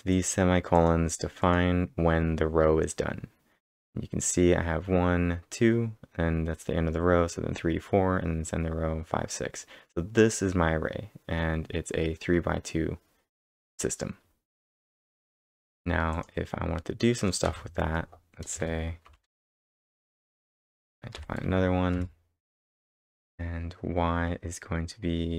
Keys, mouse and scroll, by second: 0.1 click, 0.1 ctrl+Return, 0.7 click, 15.2-16.0 typing, 15.5 click, 17.4 b, 18.5 y, 19.1 Return, 19.3 y, 19.7 space, 20.0 =, 21.2 [, 21.4 space, 23.2-23.9 typing.